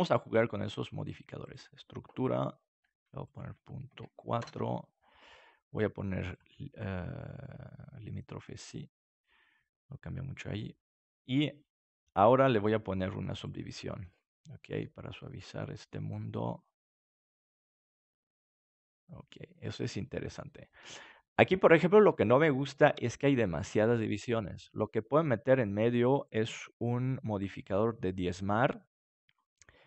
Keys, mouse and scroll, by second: 2.2 middle click, 3.2-4.9 drag, 6.2-7.9 drag, 9.0-10.8 middle drag, 12.4-14.1 drag, 14.3-17.0 middle drag, 17.0-19.5 drag, 18.5-20.3 middle drag, 26.1-28.4 drag.